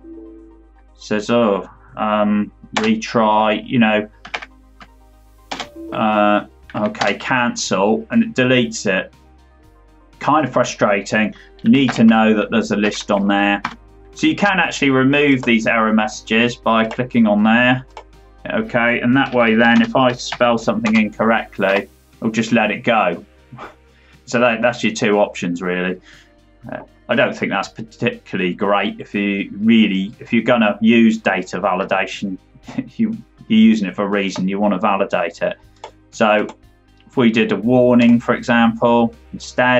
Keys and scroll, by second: 4.2 ctrl+Right, 5.4 Return, 6.6 Right, 6.9 Return, 11.8 alt+Down, 12.7 Down, 13.5 Tab, 20.8 Return, 21.6 Up.